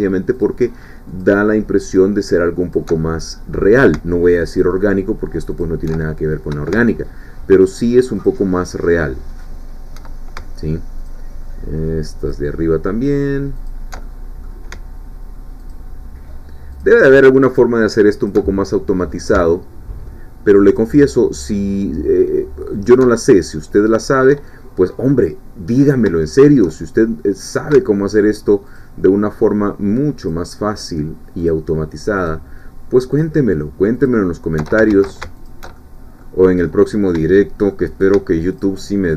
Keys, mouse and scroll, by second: 0.3 alt+shift+click, 1.2 alt+shift+click, 1.9 alt+shift+click, 2.7 alt+shift+click, 3.0 alt+shift+middle click, 3.0 alt+shift+click, 4.5 alt+shift+click, 5.6 alt+shift+click, 7.5 alt+shift+click, 8.3-9.9 alt+shift+drag, 11.1 alt+shift+click, 12.2 alt+shift+click, 13.7 alt+shift+click, 14.0 alt+shift+middle click, 15.7 alt+shift+click, 16.7 click, 18.3 click, 18.5 alt+shift+middle click, 20.8-22.4 alt+shift+drag, 22.7 alt+shift+click, 23.2 alt+shift+middle click, 24.4-26.2 shift+middle drag, 26.3-27.7 shift+middle drag, 28.7 click, 30.3 click, 31.4 click, 32.2 click, 33.1 click, 34.1 click, 34.9 ctrl+alt+shift+z, 35.5 ctrl+alt+shift+click, 35.7 ctrl+alt+shift+middle click, 36.7 middle click, 38.6 alt+shift+click.